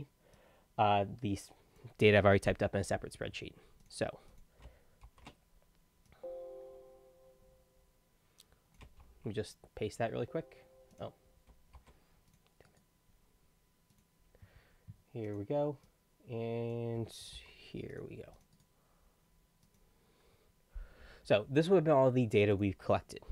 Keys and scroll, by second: 2.7 ctrl+c, 5.0 ctrl+shift+v, 9.0 ctrl+shift+v, 11.8 ctrl+c, 17.3 ctrl+c.